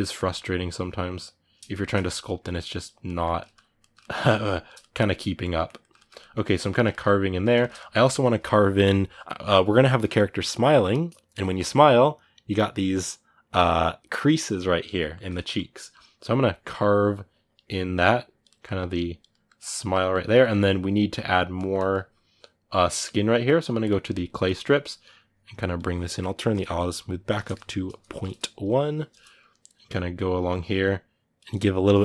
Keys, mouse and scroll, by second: 0.3-1.5 drag, 1.5 shift+middle click, 1.8-2.8 shift+drag, 2.8-4.1 middle drag, 4.1 click, 4.6 shift+middle click, 4.8 click, 5.2-15.3 middle drag, 15.3-18.2 drag, 18.2 middle click, 18.5 click, 19.1 middle click, 19.4 click, 20.0-22.7 ctrl+middle drag, 22.7-32.0 drag.